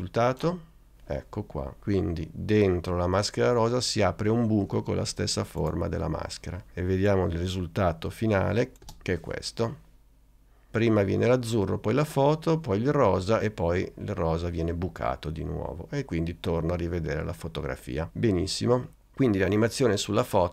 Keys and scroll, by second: 8.9 space.